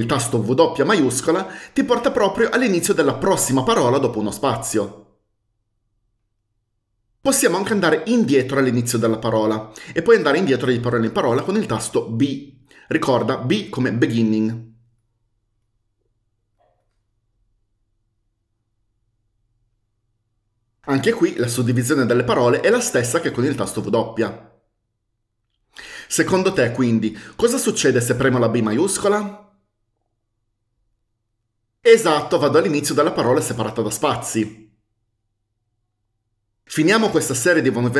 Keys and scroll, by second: 0.8 typing, 12.5 typing, 13.8 typing, 15.1 typing, 16.8 typing, 32.1 typing.